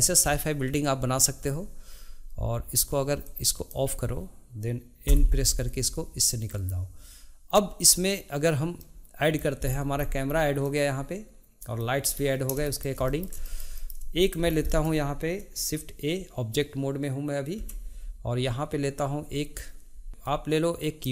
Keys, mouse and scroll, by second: 3.2 click, 5.0 n, 8.8 middle click, 9.7-10.2 scroll down 2, 10.6-12.1 middle drag, 12.1-12.6 scroll up 1, 12.6-14.2 shift+middle drag, 14.2 click, 14.5 scroll down 2, 14.7-17.5 middle drag, 17.5 shift+a.